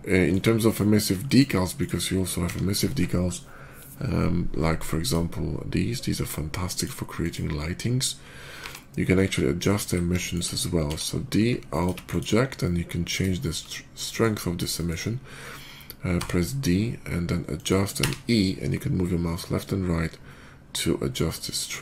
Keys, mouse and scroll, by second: 0.3 scroll up 1, 0.6 shift+middle drag, 1.1 middle click, 1.6 click, 2.3 d, 4.9 click, 6.6 click, 7.1 click, 7.9 middle click, 8.5 g, 9.5 ctrl+click, 10.0 shift+middle click, 10.3 shift+middle click, 10.7 d, 11.6 alt+click, 11.9 alt+click, 12.5-13.0 alt+middle drag, 13.3 shift+middle click, 13.5 shift+middle click, 13.9 shift+middle click, 14.6 shift+middle click, 16.0 d, 17.4 click, 17.8 e.